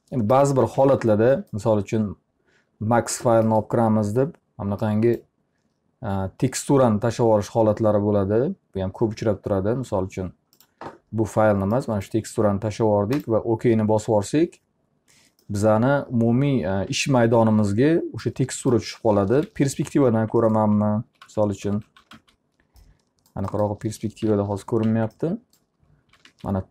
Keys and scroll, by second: 0.4-1.2 typing, 19.1 p, 20.1 z, 21.3-22.6 typing, 24.3 p, 24.9 z, 25.9-26.7 typing.